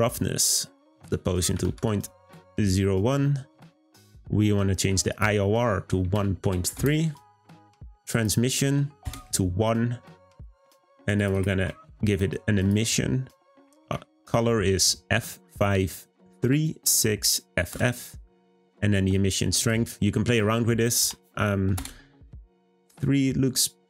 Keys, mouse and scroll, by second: 0.7-3.8 drag, 5.1-11.1 drag, 12.5 click, 19.5-22.5 drag.